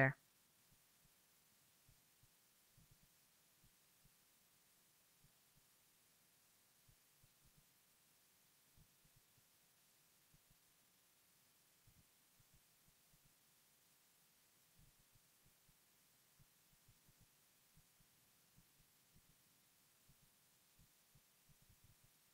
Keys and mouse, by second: 4.3 middle click, 4.6 shift+f, 5.5-13.7 drag, 8.3-13.4 middle drag, 13.4-15.8 typing, 14.1 Tab, 14.8 ctrl+i, 15.5 alt+h, 16.5 Tab, 18.5-19.5 middle drag, 19.5 KP_1, 20.7 shift+space, 21.3-21.8 drag.